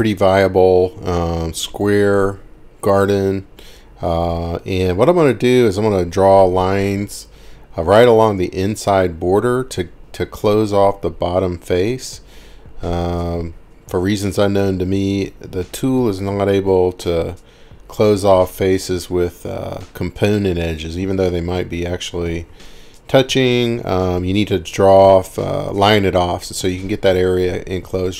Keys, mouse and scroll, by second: 0.9 scroll, 1.7 middle click, 1.8-2.1 scroll, 5.2 click, 7.0 click, 8.4 click, 10.4-10.9 scroll, 11.8 click, 13.5 click, 14.0-14.5 scroll, 14.9-15.5 scroll, 17.0 click, 17.7-18.5 scroll, 21.2 click, 23.8 scroll, 24.4 scroll up 2, 25.0 scroll up 1, 25.4 scroll down 4, 25.7 scroll, 25.8 scroll down 2, 25.9 scroll up 1, 26.1-26.5 scroll down 1, 26.9 middle click, 27.2-27.6 scroll down 4, 28.0 middle click, 28.1 scroll down 2.